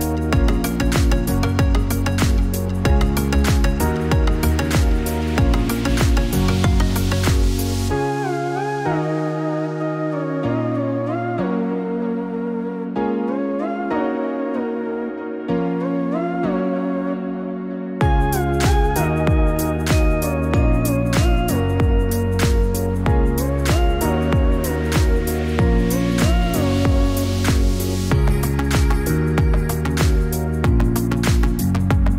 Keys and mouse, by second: 1.5 click, 4.2 click, 9.7 click, 10.8 click, 12.5-13.6 drag, 16.2 click, 16.9 click, 20.0-22.3 drag, 25.0 click.